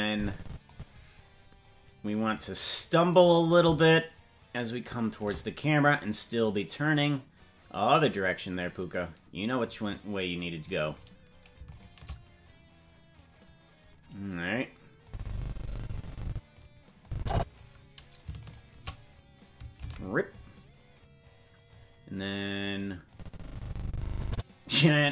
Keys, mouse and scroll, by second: 0.1 click, 1.0-1.6 scroll down 1, 3.9-5.2 shift+drag, 6.4-9.7 drag, 10.9 right click, 11.8-15.0 shift+right drag, 15.0-16.6 drag, 17.0 click, 18.5-19.8 shift+right drag, 19.8 alt+r, 23.1-24.8 drag.